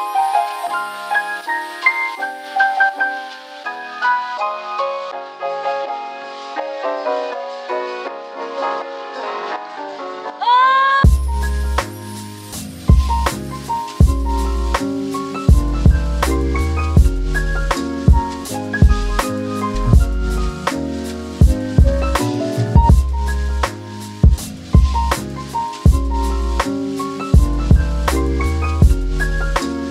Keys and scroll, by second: 0.4 super+z, 12.1 space, 17.9 super+z, 18.1 space.